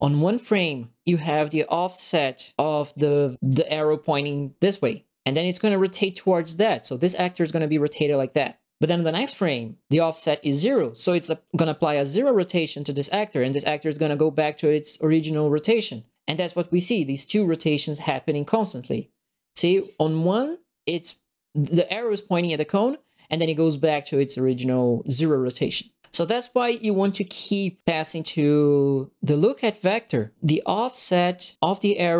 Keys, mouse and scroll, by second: 3.4 click, 17.8 click, 29.2 click.